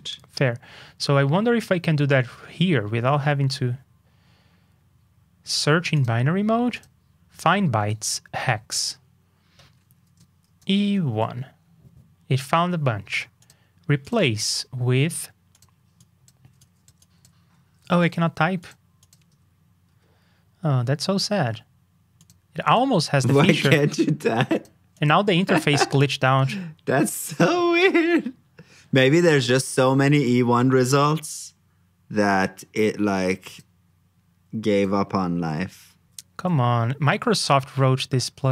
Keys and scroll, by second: 27.0 super+b, 36.0 super+b.